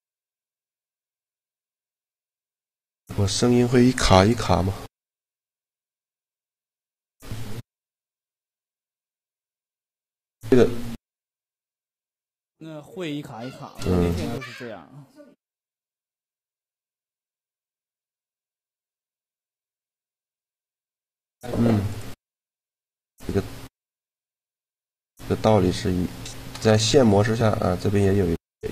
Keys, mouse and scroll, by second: 1.6-6.6 middle drag, 8.9 middle click, 9.1-10.3 drag, 10.3 shift+g, 14.5-16.3 drag, 15.3 right click, 15.7 middle click, 22.4-23.6 middle drag, 24.6 a, 25.9 shift+g.